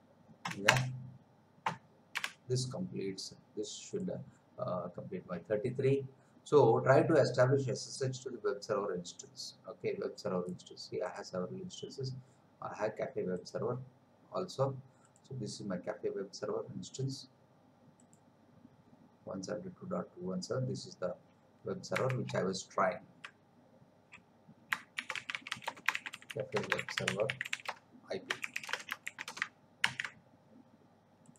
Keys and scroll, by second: 0.7 Return, 2.2 Return, 22.3 alt+Tab, 24.7-29.3 typing, 29.8 ctrl+v.